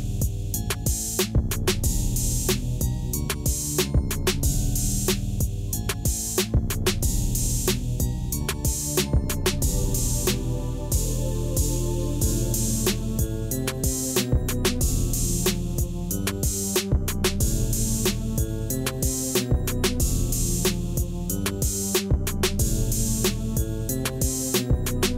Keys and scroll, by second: 1.2 Tab, 2.5 shift+z, 7.4 g, 9.1 shift+z, 13.0 shift+z, 13.7 Tab, 15.6 g, 16.6 shift+z, 18.2 alt+a, 20.5 Tab, 22.4 ctrl+r, 24.0 3.